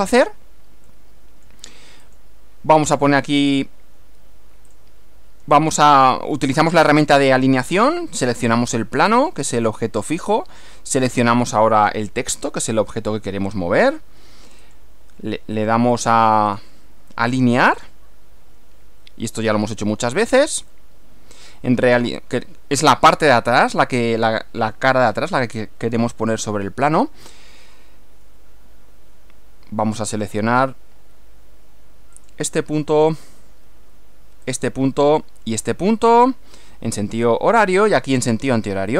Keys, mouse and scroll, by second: 0.9 middle click, 2.0 click, 4.8 click, 8.6 click, 11.2 ctrl+click, 13.9 click, 14.6 click, 16.0 click, 16.5 click, 17.8 click, 20.8-23.0 middle drag, 23.6 middle click, 32.2 click, 34.6 click, 36.0 click.